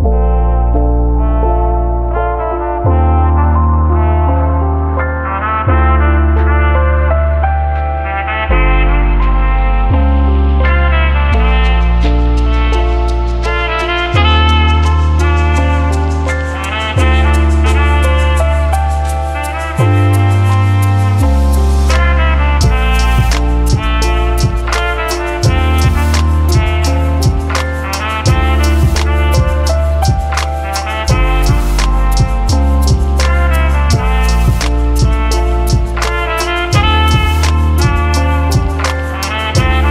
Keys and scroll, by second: 0.0-0.3 typing, 1.5-2.4 typing, 4.2-5.1 typing, 17.5 2, 17.5 Return, 18.2 5, 18.3 Return, 18.5 ctrl+z, 18.9 5, 19.0 Return, 38.2-39.4 typing.